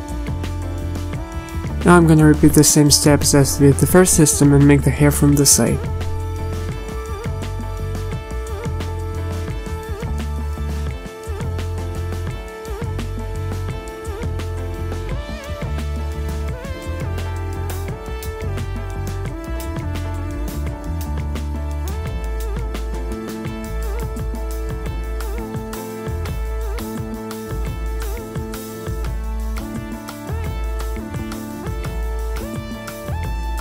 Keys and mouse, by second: 8.9 a, 9.4 z, 10.0 a, 11.5 z, 13.5 click, 14.4 a, 15.4 z, 15.4 KP_1, 16.3 KP_3, 17.8 z, 19.2-20.1 middle drag, 20.1 z, 20.2 z, 23.3 z, 23.8 z, 25.0 z, 26.5 z, 27.3 z, 29.7 z, 30.4 z, 31.0 ctrl+z, 32.2 ctrl+KP_Add, 32.2-33.6 typing, 32.3 ctrl+KP_Add.